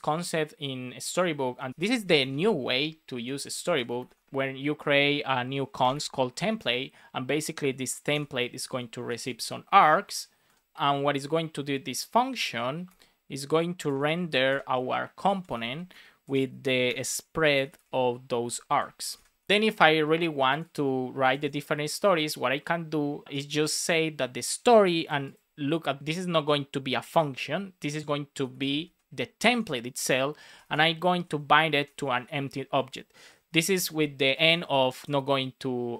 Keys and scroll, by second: 1.7 BackSpace, 2.2 space, 3.3 shift+t, 4.1 space, 5.7 space, 8.1 shift+9, 9.9 Right, 10.4 space, 10.7 BackSpace, 12.4-16.8 typing, 15.8 Return, 19.0 Right, 19.1 space, 28.2-29.0 typing, 29.4 Return, 30.7-33.3 typing, 31.6 Left.